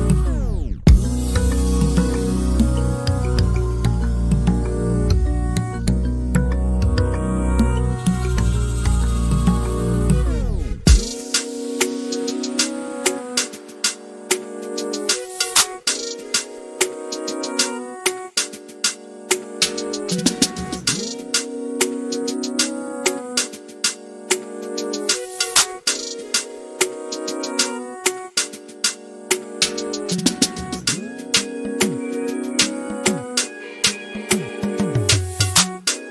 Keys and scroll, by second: 4.1 typing, 6.4-8.4 typing, 10.3-12.5 typing.